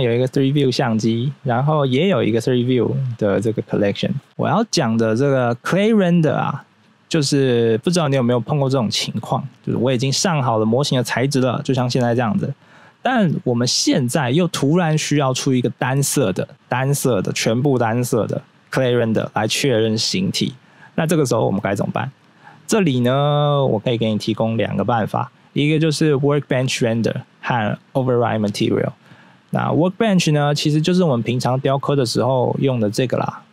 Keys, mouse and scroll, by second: 0.3 scroll up 1, 1.8 click, 3.6 click, 4.3 scroll down 1, 12.8 scroll down 1, 22.1 scroll down 1, 23.4 scroll up 1, 31.3 click, 32.6 click, 33.0 click.